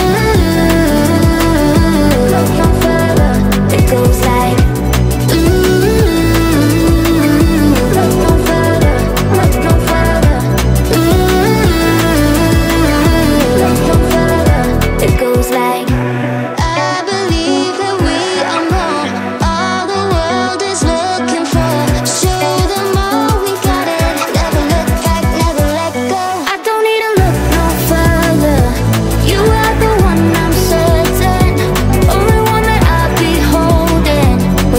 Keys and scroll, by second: 10.2-19.5 typing, 20.8 u, 25.8-26.9 typing.